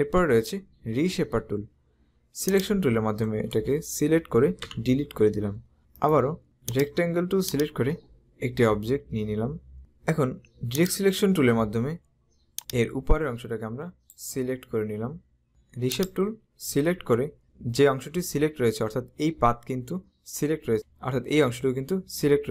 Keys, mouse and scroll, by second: 2.6 click, 4.7 Delete, 6.0 right click, 6.7 click, 10.8 click, 12.7 click, 15.5 right click, 16.0 click.